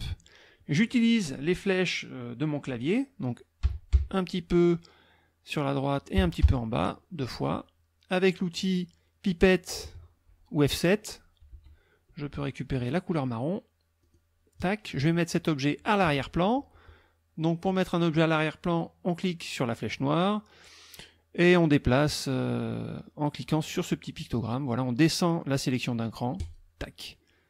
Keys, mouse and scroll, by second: 3.7 Right, 6.2 Down, 11.5 F7, 14.0 click, 17.7 click, 26.4 click.